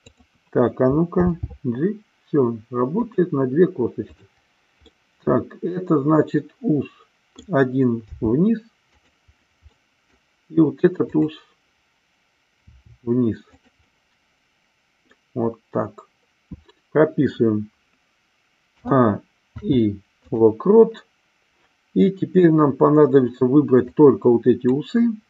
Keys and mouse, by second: 0.1 click, 1.2 g, 2.9 click, 4.1 click, 5.2-7.4 middle drag, 8.0 r, 8.8 click, 9.7 middle click, 11.0 click, 12.6 r, 13.6 click, 13.8-15.1 middle drag, 18.7 a, 19.5 i, 24.1 click.